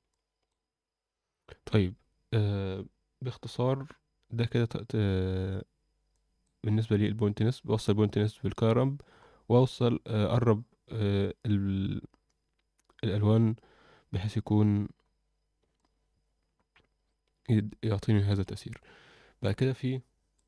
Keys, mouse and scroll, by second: 0.1-0.6 alt+middle drag, 1.4 alt+middle drag, 4.3-5.3 scroll down 4, 6.1 click, 9.1-10.3 scroll up 2, 15.1-15.6 scroll up 2, 15.7-18.2 alt+middle drag.